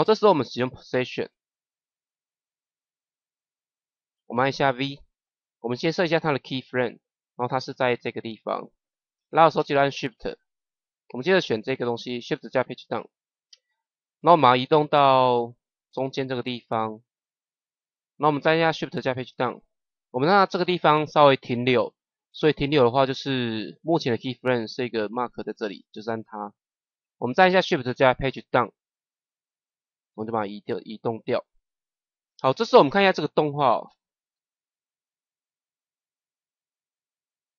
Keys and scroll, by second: 10.9 shift+Page_Down, 12.5 shift+Page_Down, 19.0 shift+Page_Down, 28.2 shift+Page_Down, 33.8 KP_0.